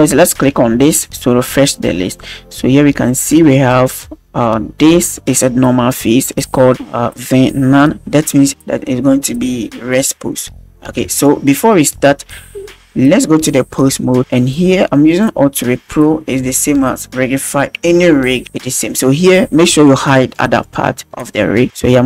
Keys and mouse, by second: 0.9 click, 3.1 click, 13.7-14.2 drag, 15.2 click, 20.7 right click, 21.8 b.